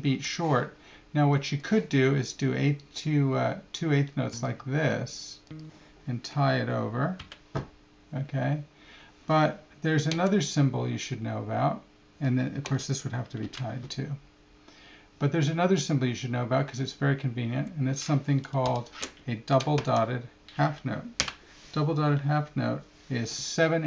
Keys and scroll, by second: 10.1 Left, 12.6 Left, 17.5 Right, 19.7 Left.